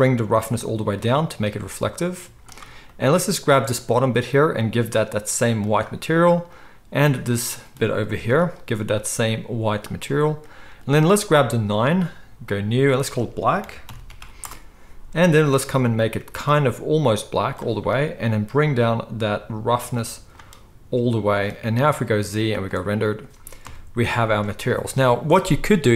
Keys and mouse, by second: 0.6-3.7 drag, 2.2 z, 3.7 middle click, 4.5-6.5 drag, 6.5-9.0 middle drag, 8.0 g, 9.0-11.2 drag, 11.2-12.5 middle drag, 12.5-15.7 drag, 15.7-19.9 middle drag, 19.9-25.9 drag, 22.1 z, 23.6 KP_0, 24.3 alt+a.